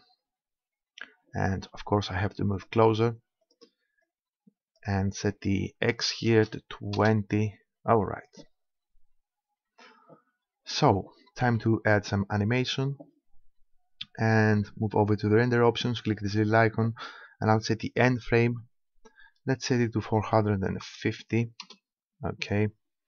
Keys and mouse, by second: 2.6-5.4 drag, 9.2-11.0 drag, 15.6-17.6 drag, 17.8-19.8 drag.